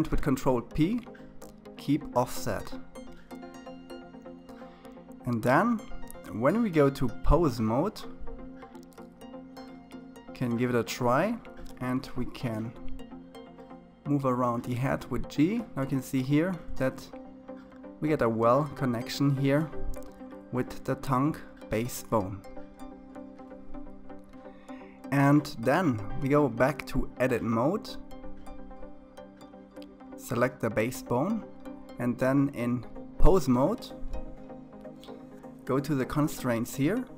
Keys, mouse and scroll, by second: 3.7-4.4 scroll down 4, 4.4-6.8 middle drag, 6.8 click, 7.6-8.9 scroll down 3, 8.9-12.0 drag, 13.5 g, 17.9 KP_3, 19.1-20.2 scroll up 4, 20.2-21.1 scroll up 2, 24.9-27.0 drag, 28.1 click, 29.6-32.6 drag, 35.4 click, 36.5 click.